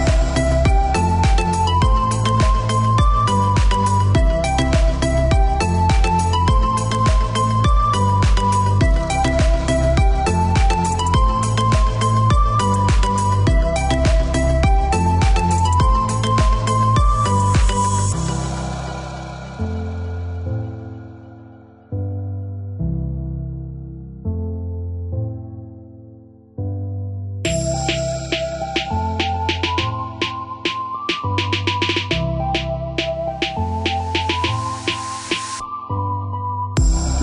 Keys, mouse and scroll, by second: 2.3 click, 4.8 click, 5.5 KP_7, 5.7 KP_5, 6.1 KP_Enter, 6.7 Escape, 8.2 click, 9.1 space, 9.9 click, 10.7 click, 12.5 click, 15.1 middle click, 16.8 click, 21.5 click, 24.8 middle click, 27.8 click, 31.4 click, 32.3 click, 33.2 middle click, 37.0 click.